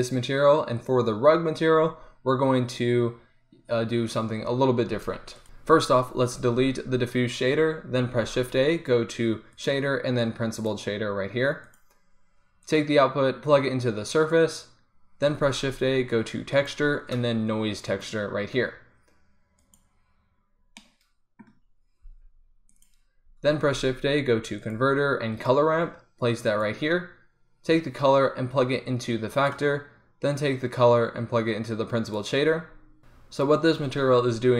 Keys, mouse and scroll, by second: 1.1-5.5 drag, 6.5 x, 8.3 shift+a, 13.0-14.6 drag, 15.8 shift+a, 22.5 g, 23.6 shift+a, 29.4 click, 30.5-32.5 drag.